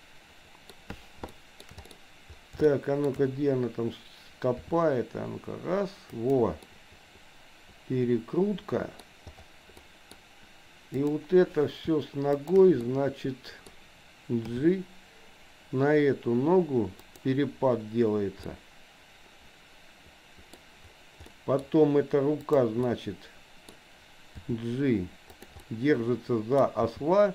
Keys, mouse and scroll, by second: 1.4 shift+middle click, 1.9 middle click, 2.6 shift+middle click, 3.0 shift+scroll down 1, 4.6 r, 6.6-9.0 middle drag, 9.7 middle click, 11.0 click, 12.4 shift+click, 12.9 middle click, 14.6 g, 18.5-20.5 middle drag, 20.5 scroll down 1, 21.4 middle click, 21.6 scroll down 1, 22.4 click, 22.9 middle click, 24.4 g, 25.6-26.6 middle drag, 27.0 g.